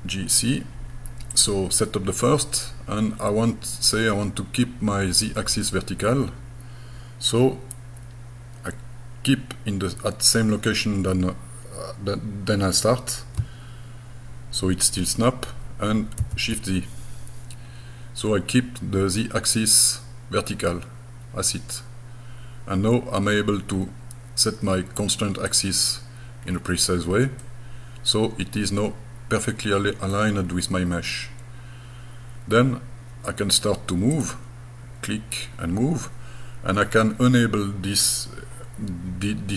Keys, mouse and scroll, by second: 1.3 click, 16.2 shift+z, 23.6-24.3 scroll up 4, 25.5 click, 26.5-26.8 scroll down 5, 27.4-30.1 middle drag, 30.4-31.0 scroll down 3, 30.9-31.2 scroll up 2, 31.3 scroll down 1, 34.1 click.